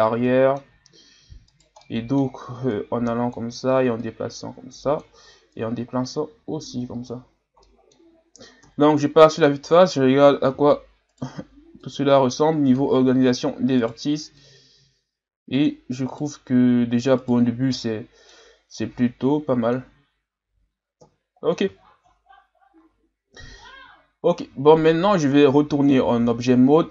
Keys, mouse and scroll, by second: 1.5 right click, 1.8 middle click, 2.7-6.5 drag, 7.4 scroll down 3, 7.6-8.6 middle drag, 8.6 KP_1, 9.7-11.1 scroll up 5, 11.1 right click, 11.8-13.8 drag, 13.8 right click, 14.4-16.1 drag, 16.1-17.5 right drag, 17.5-17.8 scroll down 1, 17.8 middle click, 18.7-20.0 drag, 20.0-21.0 scroll down 4, 21.0 KP_1, 21.9 shift+scroll up 7, 22.6 shift+scroll up 1, 23.4-24.4 ctrl+scroll up 3, 24.4 Tab, 25.4-26.7 scroll down 1.